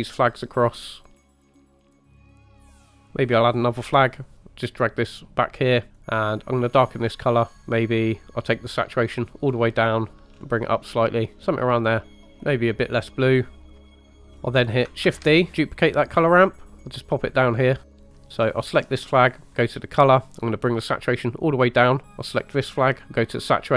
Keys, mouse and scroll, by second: 1.4 click, 1.7-2.3 drag, 2.3 click, 2.7 click, 3.8-4.2 drag, 4.3-4.9 drag, 5.0 click, 5.9 click, 8.0 click, 10.1 click, 12.1 middle click, 12.2 click, 13.7 shift+middle click, 13.7 scroll down 3, 13.8 click, 14.3 scroll up 2, 15.1 shift+d, 17.3 click, 17.6 middle click, 18.0 click, 19.4 click, 19.9 click, 22.3 click.